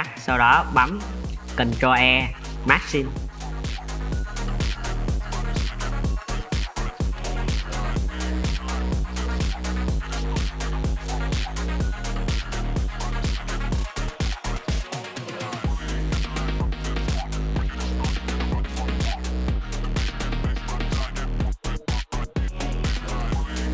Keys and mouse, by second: 0.2 middle click, 1.2 shift+middle click, 1.4-2.6 drag, 1.4-2.6 middle drag, 2.8 ctrl+e, 3.5 middle click, 4.1 middle drag, 4.3 shift+middle click, 4.9 middle click, 5.4 middle click, 5.8 middle click, 6.1 middle click, 6.5 ctrl+e, 7.1 middle click, 7.3 shift+middle click, 7.6 alt+click, 7.8 middle click, 8.1 alt+shift+click, 8.5 middle click, 9.1 ctrl+e, 9.7 middle click, 10.0 shift+drag, 10.1 middle drag, 10.4 drag, 10.4 middle drag, 10.6 shift+drag, 11.1 1, 11.3 click, 12.4 click, 12.5 shift+click, 12.9 j, 13.2 Tab, 13.3-13.7 drag, 13.8 Tab, 13.8-14.4 drag, 14.6 Tab, 14.9 Tab, 15.2 middle click, 15.4 alt+click, 15.5 middle drag, 15.7 2, 15.8 middle click, 16.1 shift+click, 16.2 middle drag, 16.7 ctrl+e, 17.1 click, 17.4 alt+click, 17.5 click, 17.9 ctrl+e, 18.6 click, 19.4 click, 20.1 click, 20.5 ctrl+e, 21.4-22.2 middle drag, 23.0-23.7 middle drag.